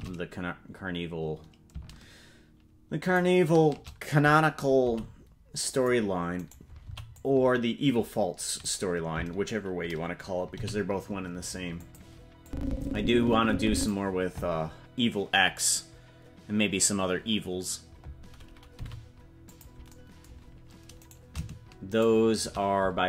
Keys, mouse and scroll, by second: 4.8 g, 6.3 right click, 6.8 c, 10.5 g, 12.4-13.9 drag, 18.7 g, 21.2 right click, 22.1 shift+right click.